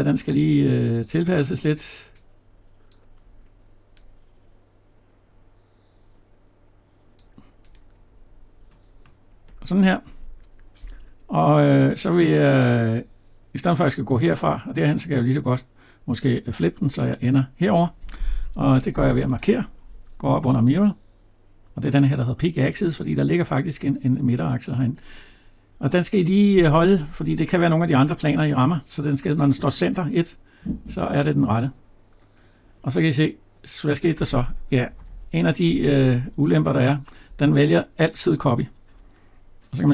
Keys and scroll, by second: 34.9 ctrl+z.